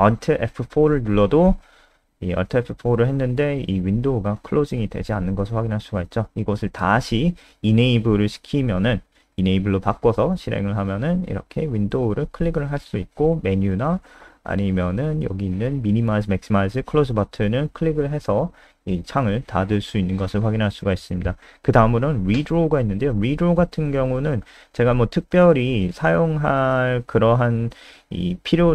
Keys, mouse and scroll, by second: 0.8 alt+F4, 3.1 click, 3.4 alt+F4, 7.1 click, 8.4-9.7 typing, 11.3 click, 18.1-19.4 scroll down 3, 19.5 scroll down 1, 21.0 Delete, 21.5 BackSpace, 23.5 click, 24.3 ctrl+c, 24.4 click, 25.1 shift+Home, 25.3 shift+Up, 25.8 ctrl+v, 26.4 click, 27.1 Home, 27.8 Down, 28.0 Down.